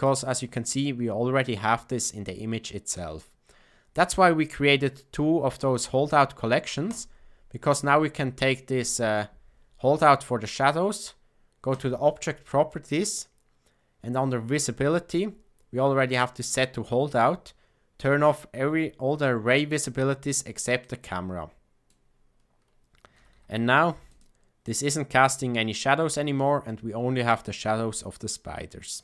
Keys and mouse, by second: 4.7 click, 6.8 click, 20.7-21.8 drag, 23.1 a, 23.3 a, 24.0 click, 28.8 click.